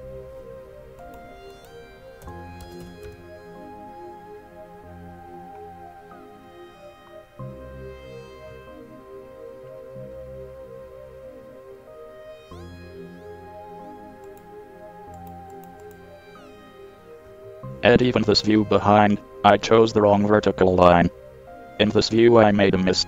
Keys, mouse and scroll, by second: 4.9-8.2 middle drag, 8.4 middle click, 20.8-21.3 middle drag.